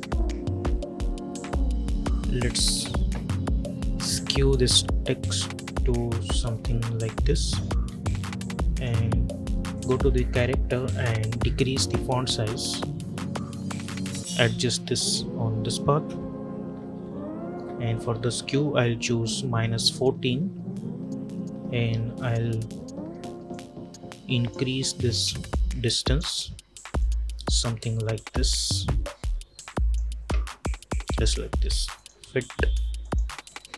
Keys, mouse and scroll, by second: 2.3-7.6 drag, 8.6-16.8 drag, 16.8-17.6 alt+scroll up 2, 17.6-18.8 scroll up 1, 23.4-24.6 drag.